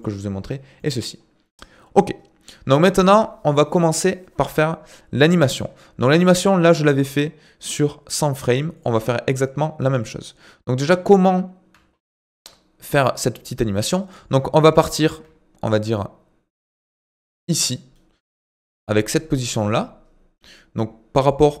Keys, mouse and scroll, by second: 0.8 middle click, 1.2-2.1 scroll down 3, 2.1-4.3 scroll down 1, 11.9-12.5 scroll up 2, 12.5-13.5 scroll down 2, 13.5-14.0 scroll down 1, 14.0 click, 14.8 g, 18.4-21.6 middle drag.